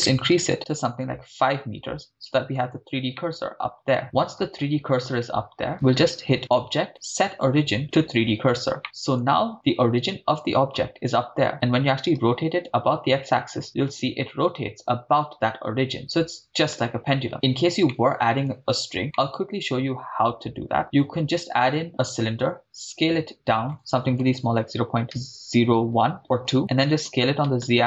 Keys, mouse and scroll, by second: 1.7 scroll down 2, 3.2-4.4 middle drag, 6.4-7.8 drag, 8.8 middle click, 10.0 click, 10.0 right click, 12.1 r, 12.7 x, 17.3 right click, 17.9 middle drag, 18.4-19.0 scroll up 2, 19.2-20.5 middle drag, 20.8 shift+a, 22.6 s, 24.2-27.8 typing, 26.3 Return.